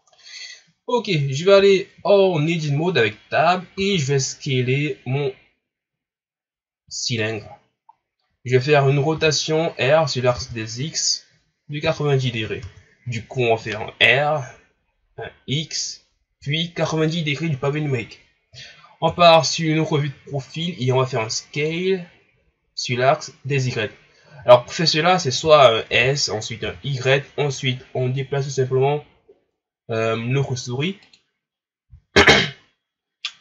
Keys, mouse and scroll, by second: 1.5 Tab, 3.8 s, 7.5-7.9 scroll down 2, 7.9-8.4 scroll up 3, 9.1 r, 19.1 KP_3, 21.5-24.6 drag, 25.8 s.